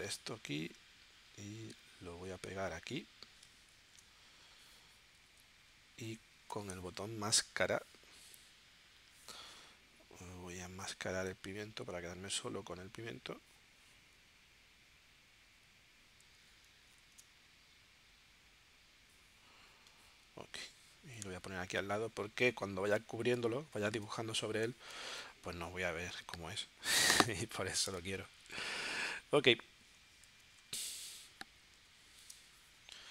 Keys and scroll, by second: 5.2 z, 6.5 v, 17.3 super+z, 21.4 z, 23.3 space, 25.2 v, 28.0 space, 31.8 z, 32.3 space.